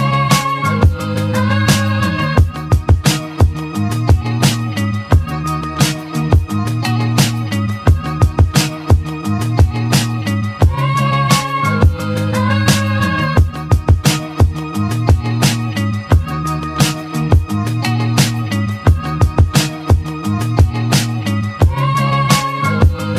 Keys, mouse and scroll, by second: 0.2-0.8 scroll down 2, 0.8-2.2 middle drag, 2.2-3.0 scroll down 2, 3.0-5.5 middle drag, 8.2-8.7 shift+middle drag, 8.7-10.0 scroll up 3, 10.0-10.8 scroll up 1, 10.8 Tab, 11.2 Tab, 11.5 click, 12.2-13.4 shift+middle drag, 13.4 shift+a, 14.8 click, 16.7-19.2 drag, 21.5 s.